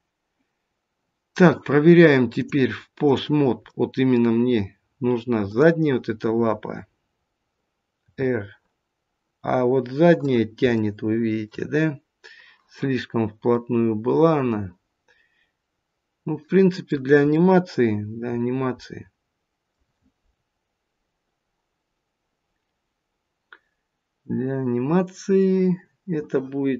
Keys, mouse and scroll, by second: 2.3 click, 3.7 middle click, 4.4-5.4 scroll down 2, 5.4 click, 7.9 r, 10.7 shift+middle click, 11.6 scroll up 1, 13.4 scroll up 2, 13.5 middle click, 17.3 middle click, 17.8-18.3 scroll down 1, 18.8 middle click, 18.8 scroll down 2.